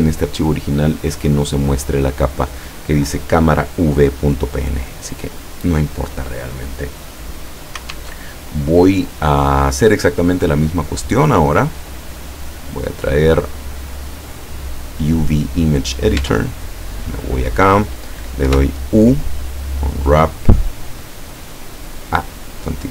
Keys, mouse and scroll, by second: 4.9 click, 8.0 alt+Tab, 11.0-12.8 drag, 13.4 click, 14.5 click, 15.6 scroll down 2, 16.3 Tab, 18.5 u, 19.7 click, 22.4 click.